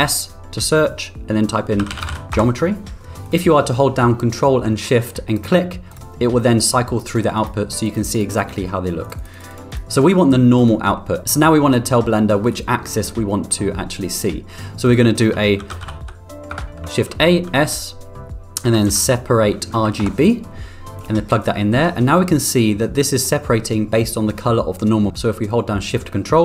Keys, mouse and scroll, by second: 5.4 ctrl+click, 7.4 ctrl+click, 7.9 ctrl+click, 8.2 ctrl+click, 8.3 ctrl+click, 9.1 ctrl+click, 9.4 ctrl+click, 9.7 ctrl+click, 10.7-11.0 middle drag, 13.3 middle click, 14.8 click, 16.7 shift+s, 17.7 shift+a, 21.9-23.3 middle drag.